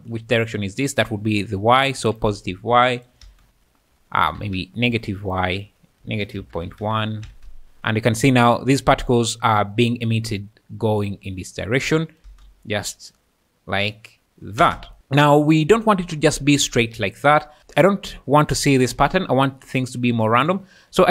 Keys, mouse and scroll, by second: 2.0 click, 3.4 space, 4.4 Escape, 5.2-6.8 drag, 7.3 space, 12.2 space, 12.2 space, 14.6 space, 17.6 space, 18.9 space.